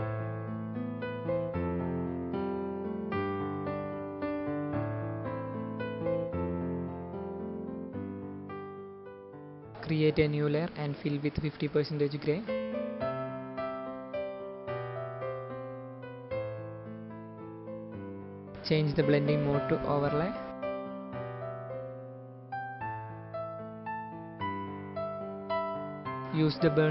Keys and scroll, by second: 0.9 space, 3.1 space, 3.9 space, 7.1 space, 12.9 shift+F5.